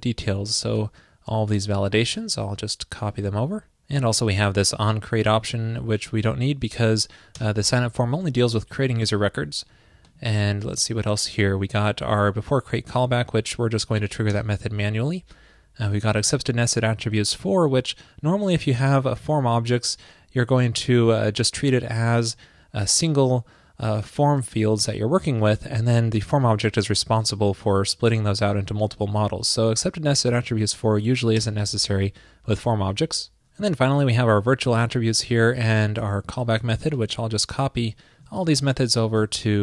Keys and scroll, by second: 1.7 super+x, 3.2 super+v, 38.5 super+x, 39.3 super+s.